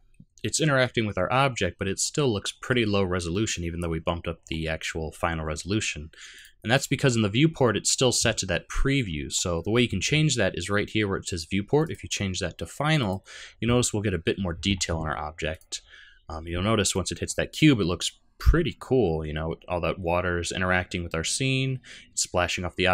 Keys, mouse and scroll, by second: 0.6 middle click, 2.0 middle click, 4.4-5.0 scroll up 3, 6.4 click, 6.7 click, 7.1-7.5 scroll up 2, 7.5-8.4 scroll down 1, 8.4-9.2 scroll up 1, 9.4-10.1 scroll up 2, 11.8 click, 15.5 click, 16.9 middle click.